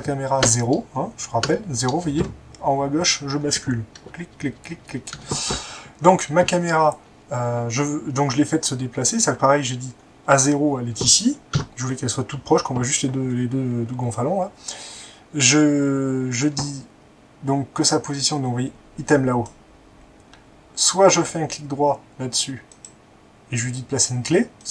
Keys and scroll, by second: 0.5-2.1 typing, 4.0-5.4 typing, 11.6 0.